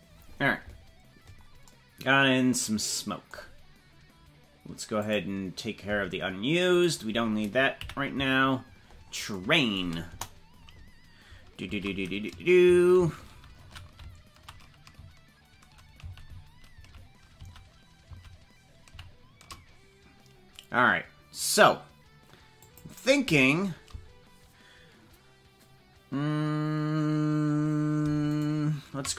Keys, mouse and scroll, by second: 5.2 click, 6.8 right click, 7.8 KP_Decimal, 8.6-9.2 scroll down 12, 10.1 KP_0, 11.7 shift+`, 28.5 shift+right click.